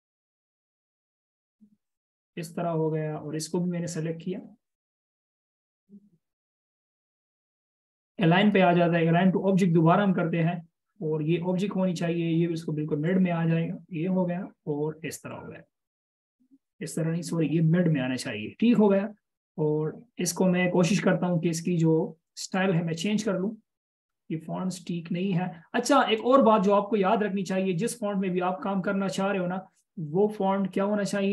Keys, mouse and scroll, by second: 14.1 double click.